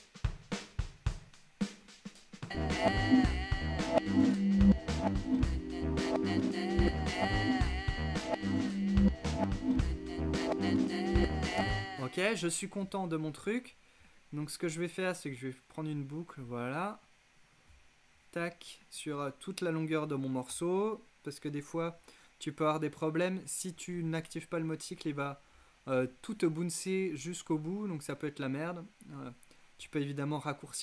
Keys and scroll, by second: 20.6 x.